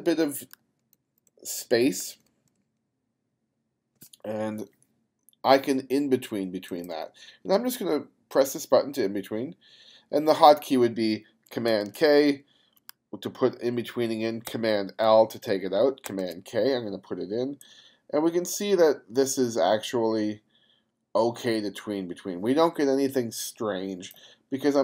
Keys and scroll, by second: 0.0 shift+=, 11.7 super+k, 14.5 super+l, 16.1 super+k.